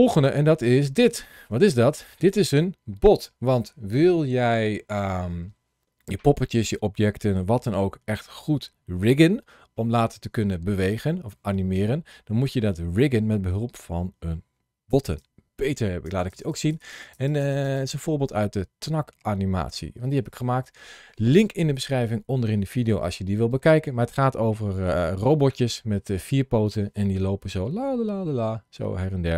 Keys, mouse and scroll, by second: 0.9 scroll down 1, 1.1 shift+middle click, 1.8 click.